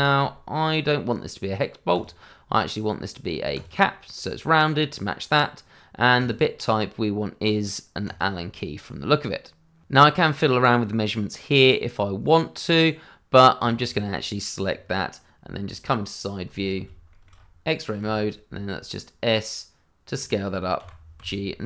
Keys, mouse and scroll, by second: 0.1 shift+middle click, 1.9 click, 6.1 click, 13.6 click, 13.9 double click, 14.7 scroll down 1, 15.6 click, 16.7 shift+z, 17.1 shift+middle click, 17.3 scroll up 1, 18.0 s, 20.1 click, 20.8 g, 21.1 z.